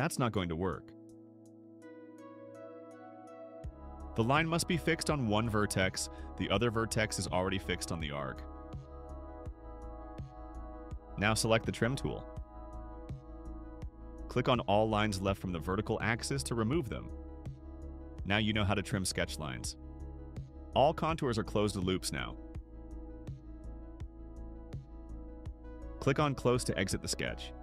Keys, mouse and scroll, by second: 0.6 click, 3.4 click, 5.5 click, 6.4 click, 10.1 click, 13.3 click, 13.7-14.1 scroll down 3, 14.9 click, 15.8 click, 16.7 click, 19.1 right click, 20.5 scroll down 1, 20.8-21.2 scroll up 2, 23.4 click, 24.0-24.7 scroll down 2, 24.3 click, 25.2 scroll down 1, 27.2 click.